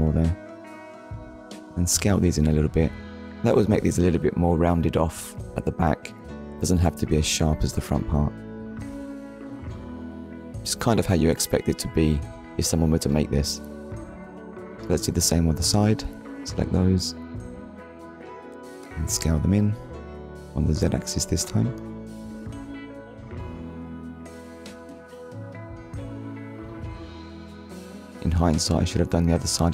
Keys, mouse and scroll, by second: 0.8 shift+click, 9.6 click, 10.0 middle click, 11.4 click, 12.8 click, 13.8 shift+click, 15.1 shift+click, 15.6 shift+click, 20.8 click, 21.5 middle click, 24.3 click, 24.8 middle click, 26.4 click, 27.4 ctrl+click, 28.6 shift+click, 29.2 ctrl+click.